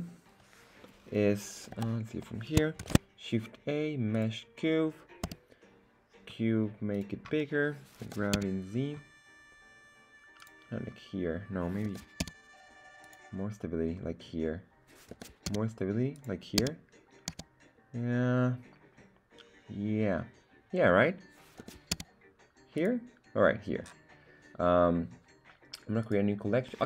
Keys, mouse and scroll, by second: 1.0 middle click, 1.7 KP_1, 2.7 shift+a, 5.2 s, 6.9 click, 8.0 g, 8.3 z, 10.3 click, 11.8 g, 12.2 z, 13.1 click, 15.1 g, 15.4 z, 16.1 click, 16.6 z, 17.2 z, 21.6 g, 21.9 z, 22.7 click, 26.0-26.7 right drag.